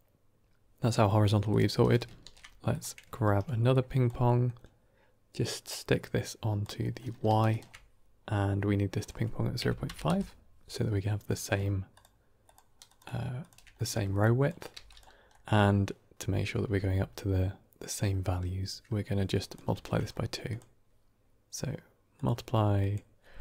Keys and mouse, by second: 1.0 middle click, 1.7 middle click, 2.1 ctrl+shift+d, 3.7 click, 4.2 middle click, 5.3-6.5 drag, 6.8 middle click, 7.4 ctrl+shift+click, 9.0-10.3 drag, 11.3 middle click, 11.8 ctrl+shift+click, 12.3 ctrl+shift+click, 12.7 ctrl+shift+click, 13.3 ctrl+shift+click, 13.7 middle click, 14.1 click, 14.6 g, 15.2 middle click, 19.3 click, 19.7 shift+d, 20.4-22.1 drag, 22.7-23.4 drag.